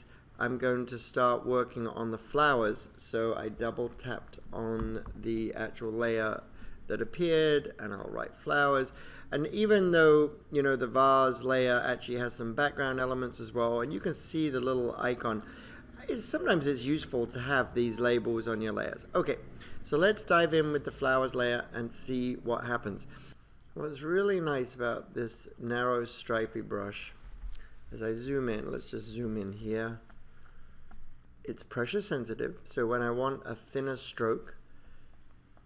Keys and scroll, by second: 28.4 super+=, 29.7 space.